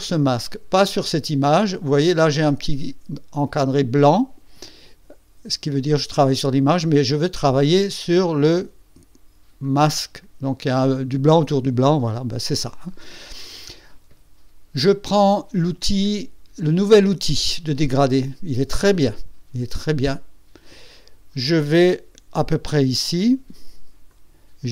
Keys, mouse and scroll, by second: 0.7 click, 9.6 click, 20.1 click, 24.0-24.7 drag.